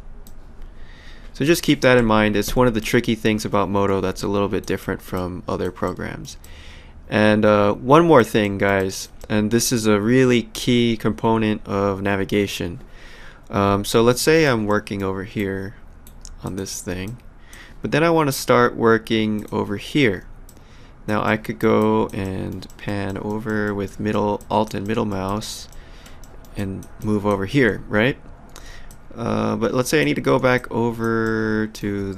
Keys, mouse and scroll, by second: 0.3 click, 2.0 Escape, 2.8 click, 4.2 alt+click, 4.8 alt+middle click, 5.2 alt+click, 5.9 alt+middle click, 6.4 alt+click, 8.5 alt+middle click, 8.8 alt+click, 14.1 alt+click, 14.7 alt+middle click, 15.4 alt+right click, 16.5 click, 17.1 alt+click, 19.4 click, 20.5 alt+click, 21.3 alt+middle click, 21.8 alt+click, 22.2 alt+middle click, 24.4 alt+click, 24.9 alt+middle click, 25.3 alt+click, 25.9 alt+middle click, 26.6 alt+click, 28.9 alt+click, 30.6 alt+click, 31.2 alt+middle click.